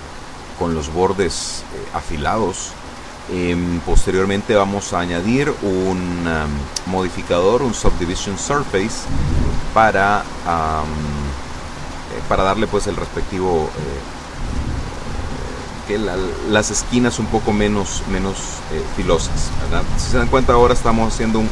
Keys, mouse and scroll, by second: 11.5 b, 11.7-12.8 drag, 13.5 s, 13.9 x, 15.0 click, 15.7 a, 16.6 b, 16.8-18.2 drag, 19.8 s, 20.1 x.